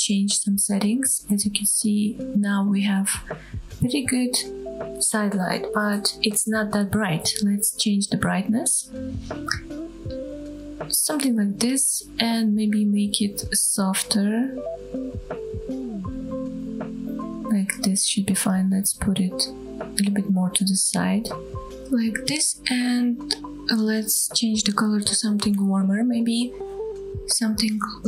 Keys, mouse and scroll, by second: 5.3-8.9 drag, 7.9 KP_0, 12.7-16.6 drag, 17.0-17.6 scroll down 1, 17.6 middle click, 17.9 KP_7, 19.0 g, 23.5 click, 24.4 click.